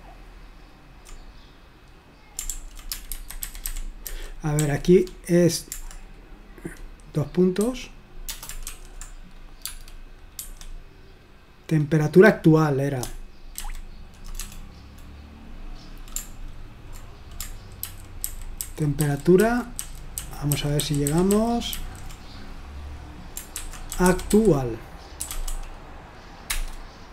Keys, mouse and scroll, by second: 2.6 ctrl+p, 3.2 alt+b, 3.4 alt+b, 3.7 alt+b, 4.1 alt+b, 4.6 alt+f, 7.6 ., 8.7 shift+;, 9.7 space, 10.4 Escape, 13.6 alt+b, 14.4 BackSpace, 17.8 ctrl+b, 18.3 ctrl+b, 18.6 ctrl+b, 19.0 ctrl+b, 19.4 ctrl+b, 19.8 ctrl+b, 20.2 ctrl+b, 20.6 ctrl+b, 20.8 ctrl+b, 21.1 ctrl+b, 21.3 ctrl+b, 21.8 ctrl+b, 23.7-26.0 typing, 26.5 Return.